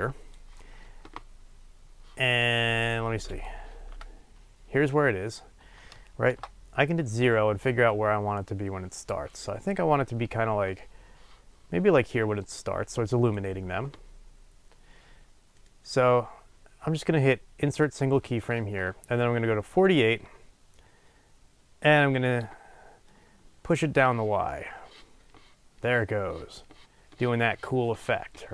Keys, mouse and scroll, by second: 4.4 ctrl+z, 6.3 KP_0, 18.0-19.7 right drag, 19.7-28.5 drag.